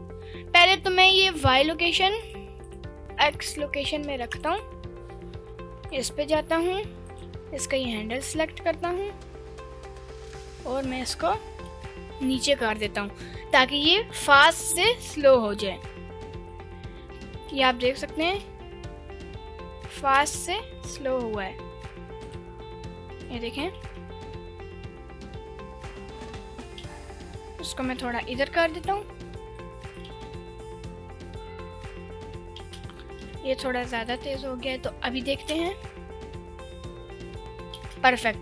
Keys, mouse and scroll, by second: 1.5 Delete, 2.2 click, 2.6 click, 4.5 click, 5.8 KP_Decimal, 7.2 click, 7.6 g, 11.6 ctrl+right click, 11.6 g, 15.5 ctrl+drag, 16.5-17.5 drag, 18.2 space, 20.2 space, 20.8 g, 22.2 ctrl+click, 23.2 click, 23.8 space, 26.8 space, 27.3 g, 29.0 ctrl+click, 29.6 click, 30.1 space, 33.3 g, 34.2 ctrl+click, 34.9-35.5 drag, 35.6 space, 37.8 space.